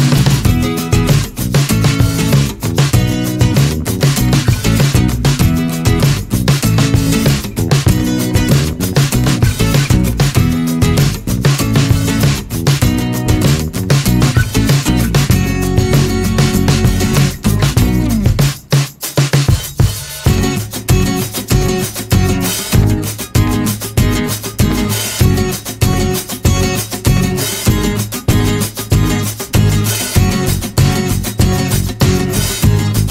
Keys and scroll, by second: 2.8 typing, 3.2 Return, 11.0-12.9 typing.